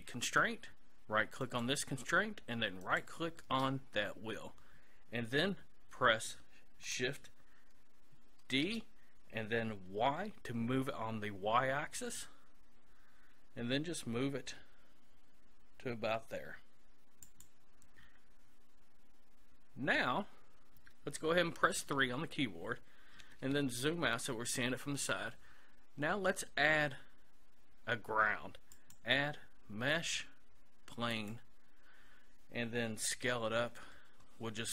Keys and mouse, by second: 0.4 right click, 1.5-4.8 right drag, 8.4 shift+d, 17.5-19.3 drag, 33.1 s.